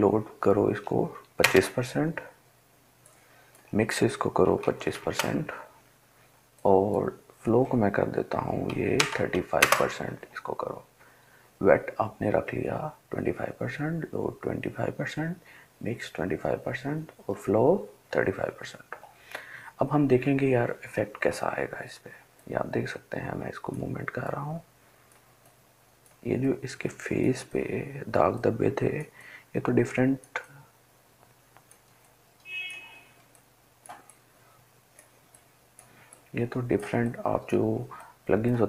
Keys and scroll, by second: 9.8 typing.